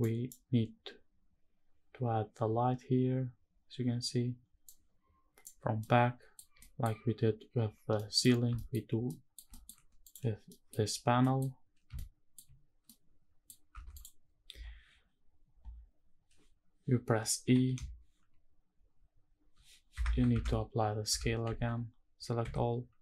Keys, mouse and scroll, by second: 5.5-6.0 middle drag, 6.3 shift+middle drag, 7.7 middle click, 8.2 shift+middle drag, 8.5 scroll up 2, 8.8 middle drag, 9.2 shift+middle drag, 9.7 click, 10.2 middle drag, 10.6 scroll up 1, 10.9 middle click, 11.7-12.0 shift+middle drag, 12.2-12.6 scroll up 1, 12.6 middle click, 13.4 Tab, 13.6 click, 17.1 i, 19.6 Escape, 20.0 Tab, 20.8 Tab, 21.2 a, 22.1 m.